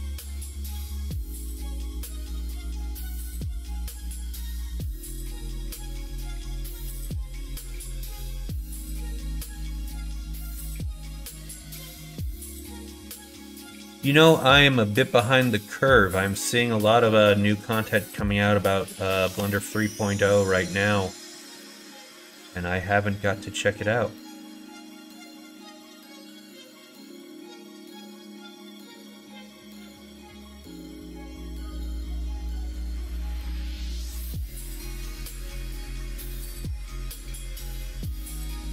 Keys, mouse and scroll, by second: 4.5-6.4 drag, 11.2 click, 12.4 click, 12.9 middle click, 13.4 middle click, 13.9 middle click, 14.3 middle click, 15.0-16.0 middle drag, 16.8 middle click, 18.2 middle click, 19.2 ctrl+z, 19.6 middle click, 20.5 middle click, 21.3 middle click, 21.7 middle click, 22.7 middle click, 23.8 alt+click, 24.4 middle click, 26.7 middle click, 28.0 middle click, 28.4 middle click, 29.3 alt+click, 30.2 middle click, 31.2 middle click, 32.1 ctrl+r, 33.6 middle click, 34.8 ctrl+z, 35.3 alt+click, 36.1 ctrl+b.